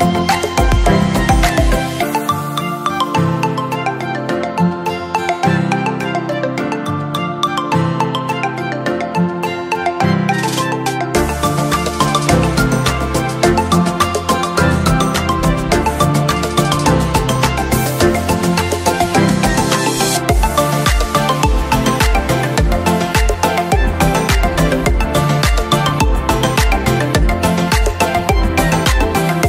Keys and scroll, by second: 12.3 ctrl+-, 13.4 ctrl+q, 14.3 ctrl+", 15.7 ctrl+-, 16.0 ctrl+", 18.8 ctrl+j, 19.1 ctrl+q, 21.7 ctrl+0.